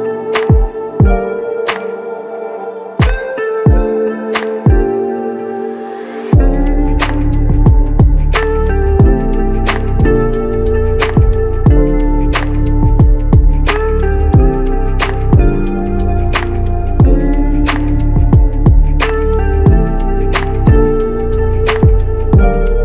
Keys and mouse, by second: 5.1 shift+click, 8.4 double click, 17.7 double click, 21.8 alt+click.